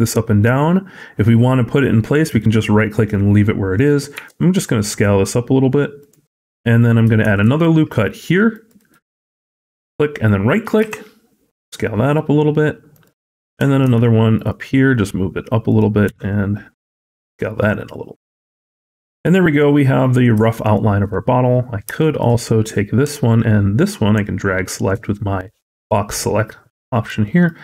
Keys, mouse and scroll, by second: 4.0 s, 7.1 ctrl+r, 10.7 s, 13.7 ctrl+r, 15.9 s, 20.5 alt+click, 21.3-21.8 scroll down 4, 21.8 shift+middle click, 22.1-22.9 scroll up 2, 23.2 shift+click, 27.1 shift+middle click.